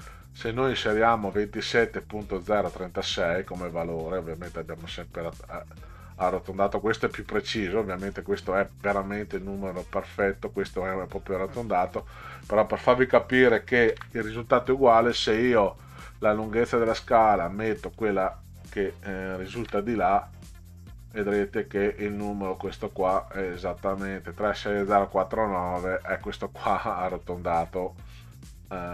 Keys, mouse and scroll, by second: 2.6 click, 4.0 click, 5.0 click, 10.4 click, 13.9 ctrl+c, 16.8 click, 18.0 click, 19.6 ctrl+v, 20.9 click, 23.0 click, 23.2 click, 23.4 click, 25.1 click, 27.7 click.